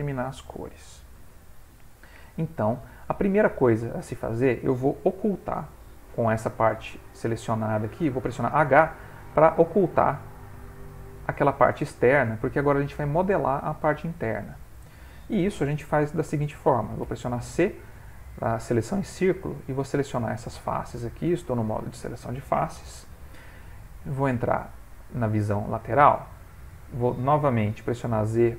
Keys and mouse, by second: 0.3 ctrl+middle click, 1.1 middle click, 2.8 middle click, 6.1 middle click, 8.9 h, 9.4 middle click, 11.2 click, 11.9 middle click, 12.2 middle click, 12.5 middle click, 14.3 ctrl+middle click, 17.0 c, 24.6 click, 25.7 ctrl+middle click, 27.9 z.